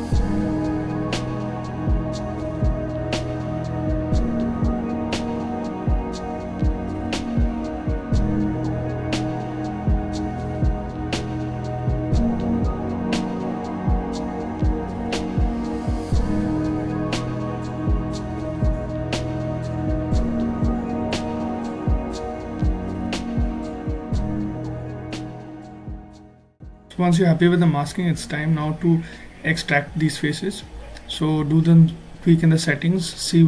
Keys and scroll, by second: 5.7 alt+z, 27.2 f.